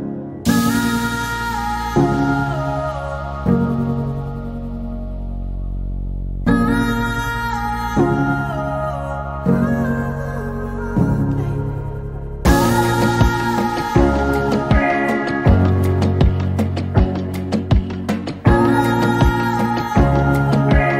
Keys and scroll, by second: 4.2 p, 11.6 m, 15.7 /, 16.6 4, 16.8 Return, 17.6 l, 19.4 f.